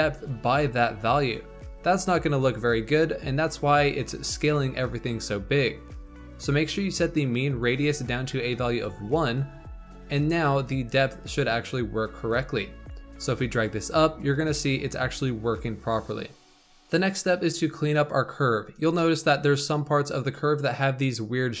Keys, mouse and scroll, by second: 7.6-9.1 drag, 10.0 Tab, 13.2-16.2 drag, 18.5 scroll up 3, 18.9-21.6 shift+middle drag.